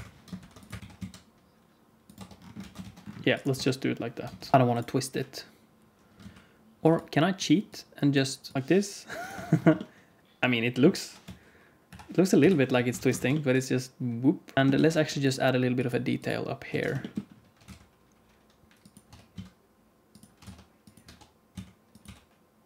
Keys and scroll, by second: 0.3 ctrl+r, 0.8 2, 0.8 s, 2.1 Tab, 2.5 alt+a, 2.8 ctrl+s, 3.5 Tab, 4.3 ctrl+r, 4.5 s, 6.1 alt+z, 8.5 alt+z, 8.5 q, 8.5 r, 9.3 Tab, 11.1 KP_1, 11.8 KP_5, 12.3 KP_5, 12.9 alt+a, 13.2 ctrl+s, 14.5 alt+z, 14.5 ctrl+s, 14.5 Tab, 16.6 alt+z, 17.5 e, 19.0 e, 21.0 e, 21.9 s.